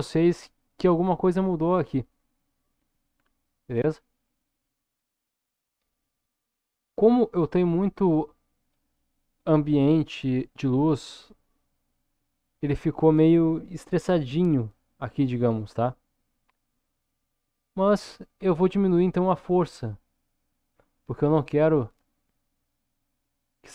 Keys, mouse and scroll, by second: 2.1-4.2 middle drag, 4.9 scroll up 1, 5.6 scroll down 1, 17.1-23.7 drag.